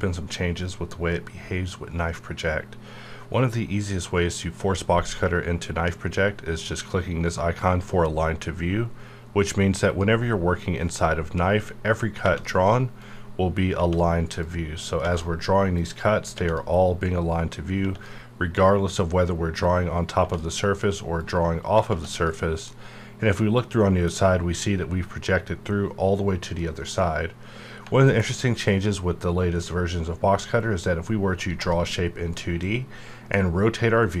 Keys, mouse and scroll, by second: 9.9 click, 13.0 click, 14.4 click, 15.8 click, 17.0 click, 19.6 click, 21.2 click, 22.7-26.4 middle drag, 26.6 middle click, 26.7-29.6 middle drag, 29.6-31.5 drag, 31.5 Tab, 32.4-34.2 middle drag.